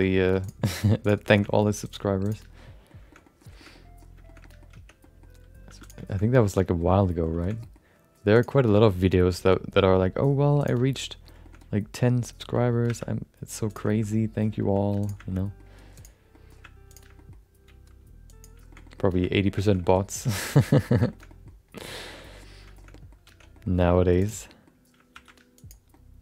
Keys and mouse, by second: 0.0 middle click, 1.3 shift+middle click, 1.8 click, 2.7 middle click, 3.1 middle click, 3.5 shift+middle click, 3.7 middle click, 4.3 shift+middle click, 4.7 Tab, 5.0 middle click, 5.6 2, 5.8 click, 6.0 shift+middle click, 7.0 middle click, 7.4 shift+middle click, 7.6 middle click, 8.3 click, 8.6 shift+middle click, 8.8 middle click, 9.3 g, 11.0 middle click, 11.4 middle click, 11.6 middle click, 12.8 1, 13.7 click, 13.9 shift+middle click, 14.1 middle click, 14.6 g, 15.3 shift+middle click, 15.9 click, 16.3 middle click, 16.9 shift+click, 17.1 middle click, 17.6 g, 18.7 middle click, 18.8 middle click, 19.1 middle click, 19.3 middle click, 19.6 middle click, 19.8 middle click, 20.3 Tab, 20.4 shift+middle click, 20.7 middle click, 21.1 shift+middle click, 21.2 middle click, 22.1 shift+middle click, 22.2 middle click, 22.7 middle click, 22.9 middle click, 23.3 Tab, 23.5 middle click, 24.2 click, 24.5 middle click, 25.1 shift+2, 25.5 click, 25.9-26.2 middle drag.